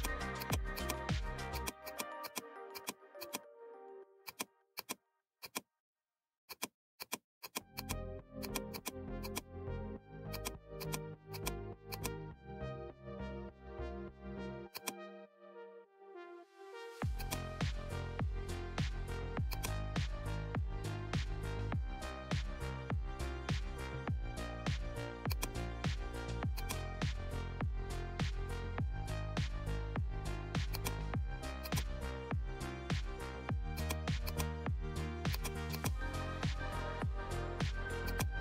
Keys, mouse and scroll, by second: 14.7 click, 17.1-25.3 drag, 25.3-33.2 drag, 33.2 right click, 33.7 click, 38.0 click.